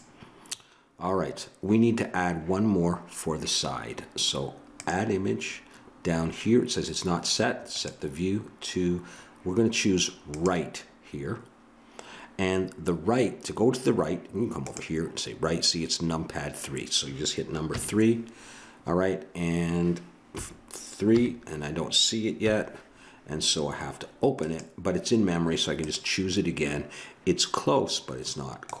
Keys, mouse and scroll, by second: 0.0 click, 17.7 KP_3, 20.3 KP_5, 21.1 KP_3, 22.4 KP_5, 25.6-27.7 drag.